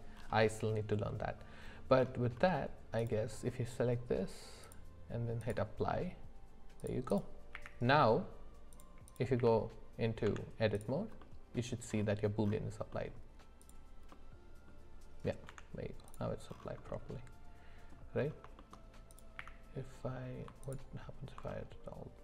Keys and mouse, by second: 3.0 click, 4.6-5.7 drag, 6.8 click, 7.1 click, 7.5 q, 9.0 click, 9.4 q, 10.2 Tab, 11.2 middle click, 12.9 middle click, 14.1 middle click, 15.4 Tab, 16.9-17.9 middle drag, 18.6 shift+middle click, 19.1 click, 19.4 q, 21.5-22.2 middle drag.